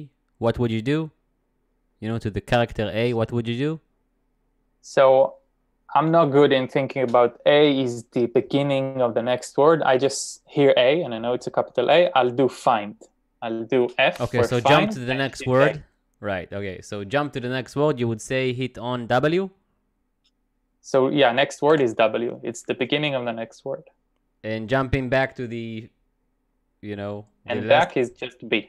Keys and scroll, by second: 14.9 f, 15.5 shift+a, 21.7 w, 27.9 b.